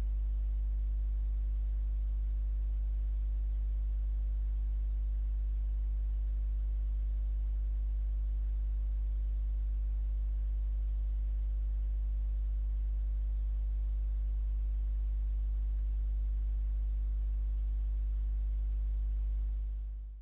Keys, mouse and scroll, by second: 3.8-5.1 drag, 6.5-8.7 drag, 9.6-12.0 drag, 12.6-13.7 drag, 15.9 Escape.